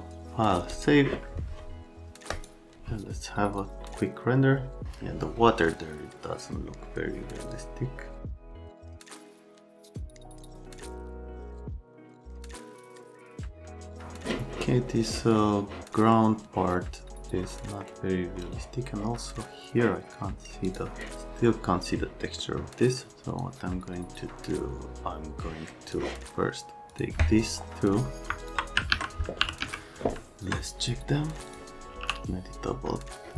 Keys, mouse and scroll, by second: 0.7 click, 2.3 click, 12.3 right click, 17.5 right click, 18.3 right click, 20.6 click, 22.4 right click, 23.4 click, 26.9 click, 28.4 click, 28.9 alt+q, 29.1-30.1 typing, 31.6-32.4 typing.